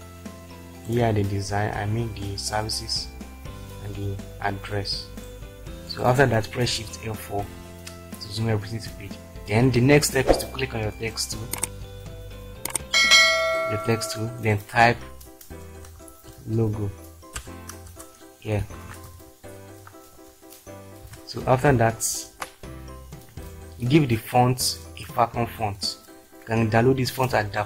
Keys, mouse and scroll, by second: 7.5 shift+F4, 15.9-17.4 typing, 18.0 Return, 18.6-21.1 typing, 22.6 ctrl+space.